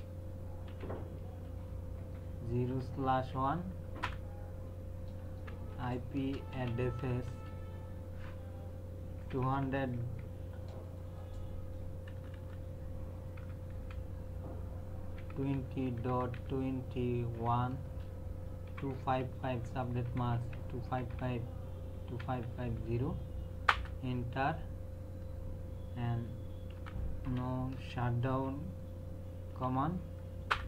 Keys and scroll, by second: 0.0-3.2 typing, 4.0 Return, 5.3-7.5 typing, 9.2 KP_2, 9.4 KP_0, 9.6 KP_Decimal, 9.9 KP_2, 12.1 BackSpace, 13.7 KP_0, 13.7 KP_Decimal, 15.0-16.3 typing, 17.8-21.1 typing, 22.4 KP_Decimal, 22.8 KP_0, 23.7 Return, 26.7-28.3 typing, 29.5 h, 30.5 Return.